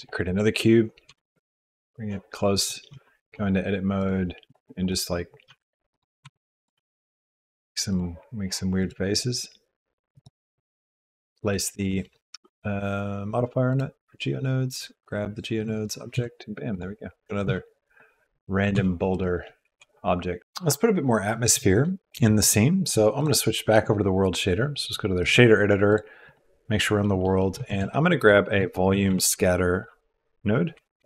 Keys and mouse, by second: 1.1 g, 2.9 Tab, 4.0 click, 4.8 click, 5.5 s, 6.2 e, 6.7 s, 7.9 click, 8.8 click, 10.1 click, 10.9 Tab, 10.9 e, 11.9-13.8 drag, 14.7 click, 16.1 g, 17.4 g, 18.7 g, 19.6 shift+g, 20.4 g, 23.2-25.2 drag, 25.8 click, 27.0 click, 27.3 click, 27.7 shift+a.